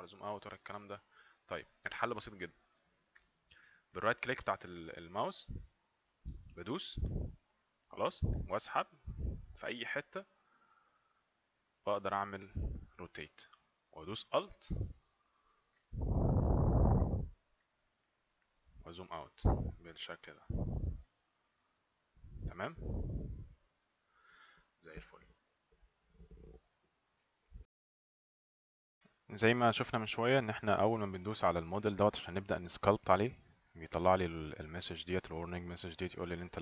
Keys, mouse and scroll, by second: 6.9 right click, 16.7 right click, 19.2 ctrl+right click, 20.2 ctrl+right click, 21.1 ctrl+right click, 27.2 alt+Num_Lock, 27.5 F9, 33.2 click.